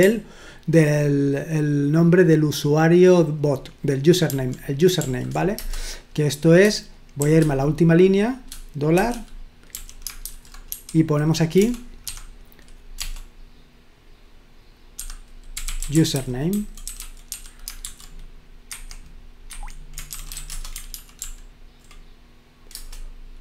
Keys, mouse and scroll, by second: 4.3 ctrl+p, 5.0 ctrl+p, 5.6 Return, 7.2 shift+g, 9.0-13.0 typing, 14.9-18.2 typing, 18.7 Escape, 19.5 Escape, 20.1-20.8 typing, 21.2 ctrl+p, 22.8 Return.